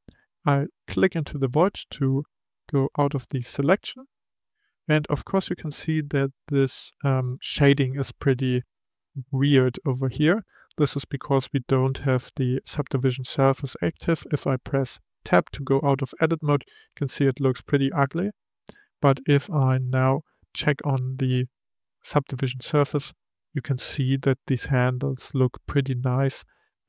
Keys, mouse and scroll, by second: 0.8 click, 2.5 click, 3.2-6.2 middle drag, 15.2 Tab, 16.1 click, 16.7-21.0 middle drag, 21.8 click, 23.0-26.1 middle drag.